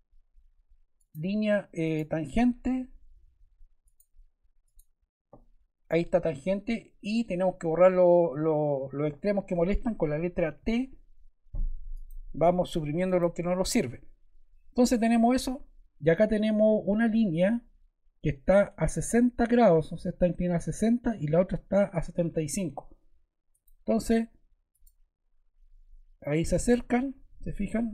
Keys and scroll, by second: 10.5 t.